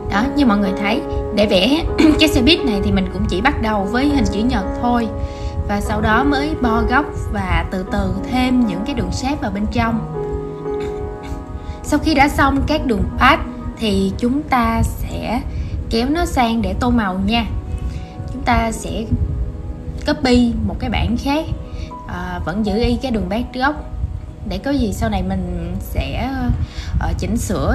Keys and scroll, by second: 0.2 super+z, 1.5 super+e, 4.2 super+g, 22.1 super+z.